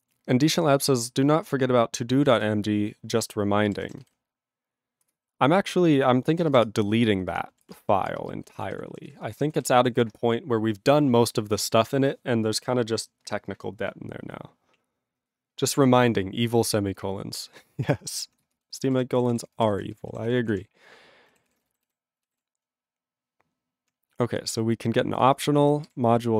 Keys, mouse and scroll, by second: 3.6 ctrl+g, 5.1 ctrl+Return, 6.6 Return, 7.6 ctrl+a, 7.7 ctrl+space, 7.8 ctrl+g, 8.0 ctrl+space, 8.5 ctrl+alt+b, 8.7 ctrl+g, 9.0 ctrl+s, 9.1 ctrl+space, 9.5 ctrl+alt+f, 9.6 ctrl+g, 10.0 ctrl+s, 18.6 ctrl+space, 18.9 ctrl+alt+b, 18.9 ctrl+g, 19.4 ctrl+s, 19.4 ctrl+space, 19.9 ctrl+alt+f, 19.9 ctrl+g, 20.3 ctrl+s, 20.4 ctrl+p, 20.5 ctrl+e, 20.5 ctrl+p, 21.5 ctrl+s, 21.9 alt+b, 24.2 ctrl+p, 24.9 ctrl+n, 25.1 ctrl+a, 25.2 ctrl+space, 25.3 ctrl+e, 25.9 ctrl+g.